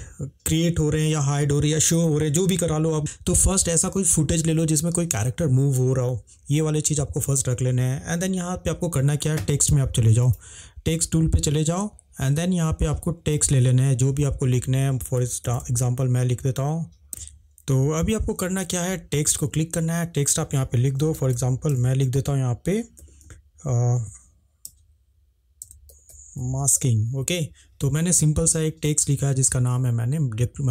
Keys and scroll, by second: 15.3-17.2 typing, 21.0-22.9 typing, 24.6 a, 25.6-27.2 typing.